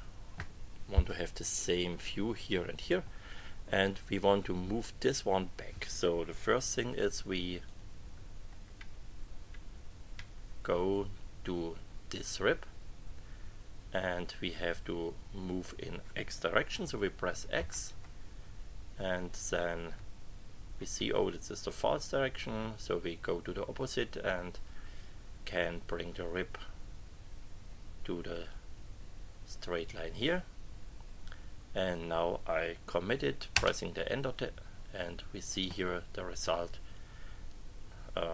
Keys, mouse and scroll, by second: 7.6 click, 8.7 Right, 9.5 Right, 10.3 Right, 17.5 x, 19.9 Up, 21.1 Down, 26.0 Down, 33.5 Return.